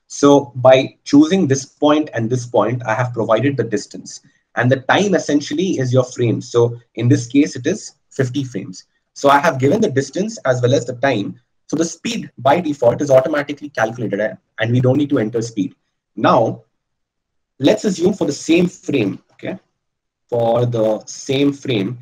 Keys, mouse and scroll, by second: 20.0 ctrl+z, 21.5 ctrl+z.